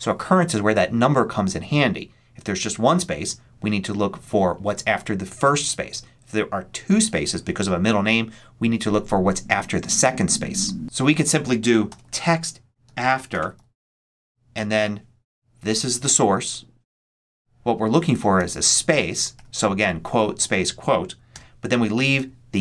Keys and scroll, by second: 11.5-14.4 typing, 18.4 shift+', 18.8 shift+space, 19.2 shift+', 21.2 '.